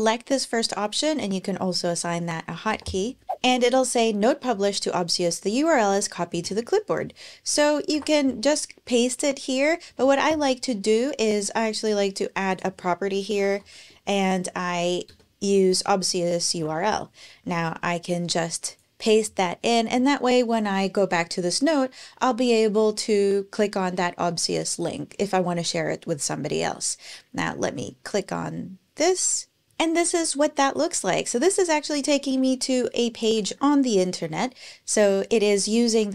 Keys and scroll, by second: 2.5 Return, 7.3 Return, 7.7 super+v, 9.8 super+BackSpace, 12.8-14.2 typing, 14.3 Down, 14.8 Return, 16.3 super+v, 29.6 ctrl+alt+Return, 33.2 super+l.